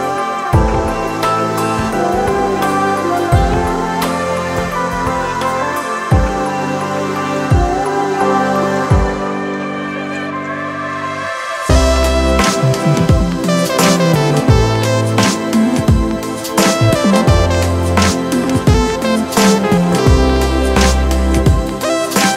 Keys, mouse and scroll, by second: 8.3 ctrl+click, 9.9 ctrl+click, 13.3 ctrl+click.